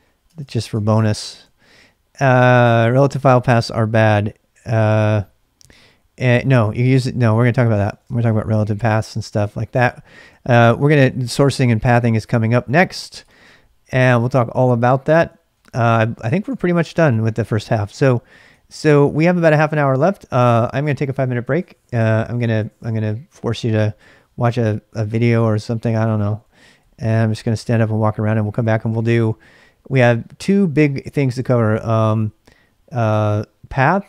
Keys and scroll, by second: 0.0-1.9 typing, 7.8-11.7 typing, 13.2-18.5 typing, 20.2-20.9 typing, 25.8-31.4 typing.